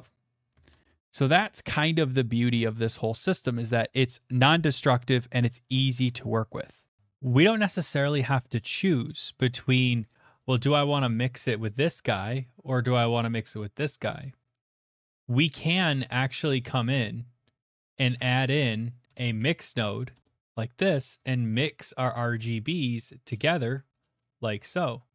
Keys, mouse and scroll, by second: 0.6 ctrl+z, 3.3 middle click, 6.5 middle click, 7.0 right click, 11.5 right click, 13.8 right click, 15.0 click, 15.4 click, 16.4 click, 17.7 click, 17.9 click, 18.1 shift+a, 18.3 click, 19.1 typing, 20.1 Return, 21.3 click, 22.3 middle click, 22.3 middle click, 22.7 middle click, 24.2 click.